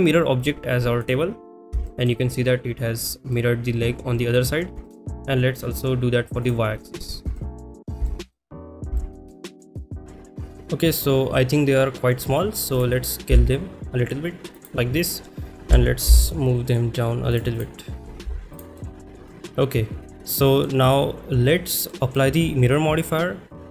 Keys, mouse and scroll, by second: 1.8 shift+middle drag, 3.0 click, 3.3-4.3 middle drag, 4.8 shift+middle drag, 6.4 click, 6.9 middle drag, 7.3 shift+middle click, 8.0 shift+middle click, 8.9 shift+middle drag, 9.4-10.0 middle drag, 10.9 click, 12.8 click, 14.6 click, 14.6 s, 17.3 g, 17.3 z, 17.6 click, 18.8-20.6 middle drag, 21.9 middle drag, 23.0 click.